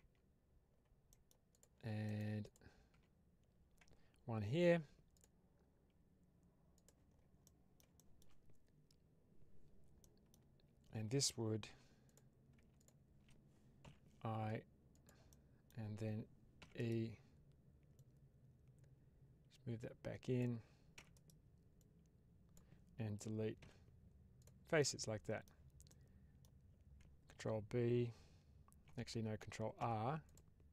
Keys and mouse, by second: 1.0 middle click, 1.4 click, 1.9 middle click, 2.8 Tab, 4.5 ctrl+r, 6.6 click, 7.3 middle click, 7.8 shift+middle click, 9.9 middle click, 11.7 3, 12.0 click, 14.8 click, 14.8 1, 15.2 middle click, 16.5 e, 16.6-17.9 right drag, 17.9-20.3 drag, 20.8 e, 21.0 right click, 21.7 click, 23.5 x, 24.7 middle click, 25.8 middle click, 29.7 ctrl+r.